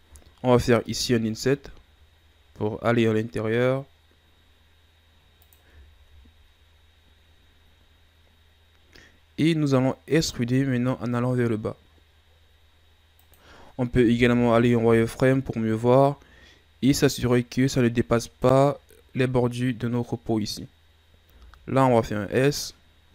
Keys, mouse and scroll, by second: 0.9 i, 5.8-7.1 scroll down 2, 7.1-7.8 scroll down 1, 7.8-10.1 scroll down 1, 10.1 e, 14.0 KP_1, 14.4 z, 15.1-15.5 scroll down 2, 15.5-17.1 scroll up 1, 17.1-20.1 drag.